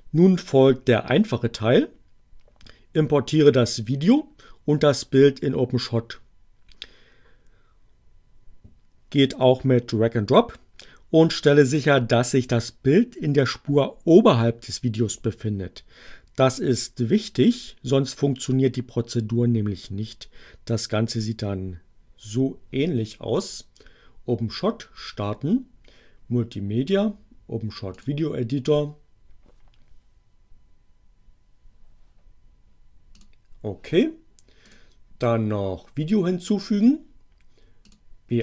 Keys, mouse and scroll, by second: 23.4 click, 27.9 click, 33.1 click, 34.6 click, 37.8 click.